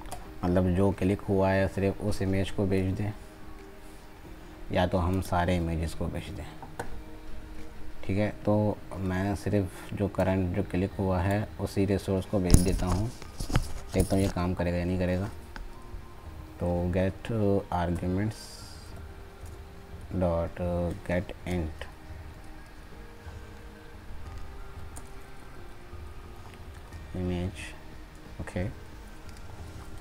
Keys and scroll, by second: 29.8 ctrl+space.